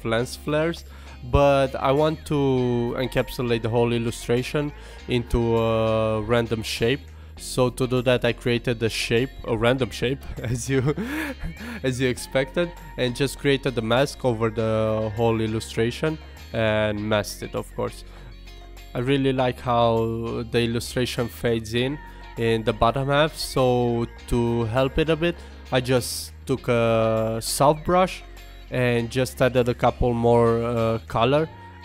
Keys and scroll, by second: 9.6 alt+BackSpace.